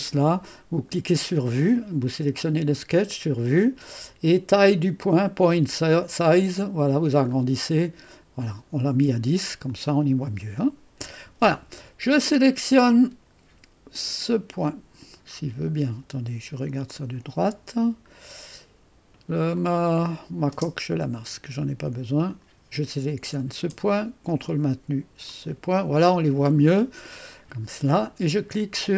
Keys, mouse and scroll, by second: 0.0 click, 1.6 click, 2.3 click, 5.8 click, 6.7-7.8 scroll up 2, 7.8-9.7 scroll up 1, 9.7 click, 12.3 click, 16.9 click, 17.9-19.5 scroll up 2, 19.5 scroll up 1, 19.6 click, 20.6 space, 22.3 click, 25.3 click.